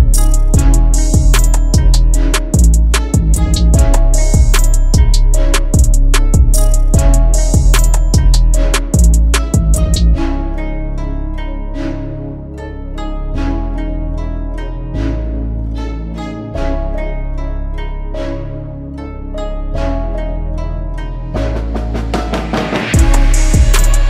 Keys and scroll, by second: 15.3 2, 16.4 /, 16.8 4, 17.3 Return.